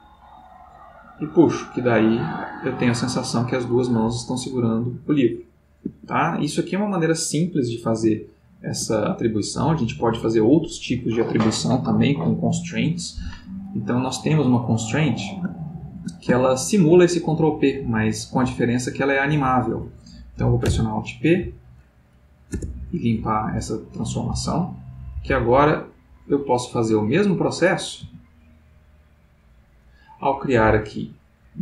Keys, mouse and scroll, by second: 5.8 Escape, 8.1 ctrl+middle click, 14.1 click, 15.5-16.2 ctrl+middle drag, 16.4-17.2 ctrl+shift+middle drag, 17.5 click, 18.3 x, 20.6 alt+p, 21.4 alt+Down, 22.5 Return, 24.1-25.3 middle drag, 25.3 g, 26.3 click, 27.3-28.7 middle drag, 31.5 click.